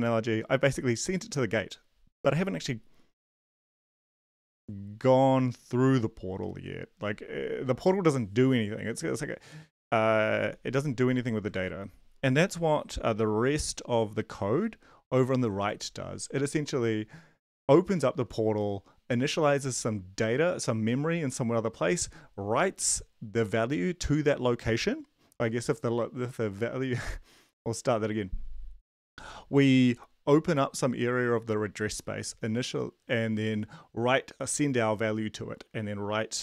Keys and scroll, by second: 11.5 ctrl+`.